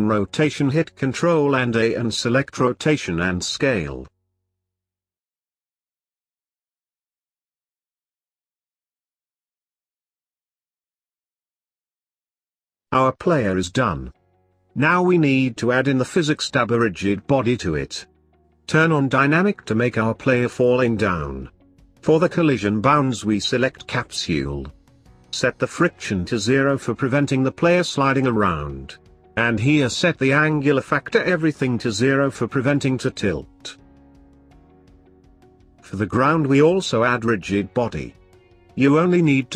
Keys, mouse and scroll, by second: 3.8 r, 6.4-9.5 drag, 13.2 click, 14.1-19.4 drag, 19.9-21.1 scroll down 4, 21.1-24.3 drag, 24.8-29.4 drag, 29.5-33.0 drag, 34.5-36.6 drag, 37.7-39.5 drag.